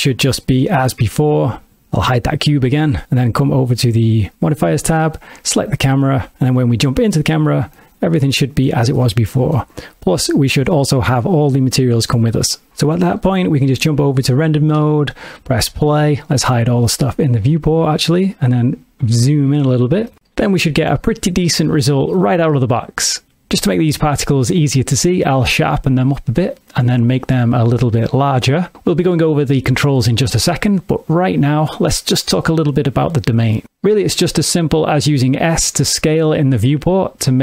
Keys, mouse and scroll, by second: 2.3 click, 3.6 click, 4.6 click, 5.5 click, 7.8 ctrl+middle click, 9.0 ctrl+middle click, 10.8 click, 13.2 click, 14.8 click, 15.9 space, 17.8 click, 18.7 ctrl+middle click, 21.2 shift+middle click, 23.9 middle click, 25.0 click, 29.0 click, 31.2 ctrl+middle click, 32.8 click, 36.1 s.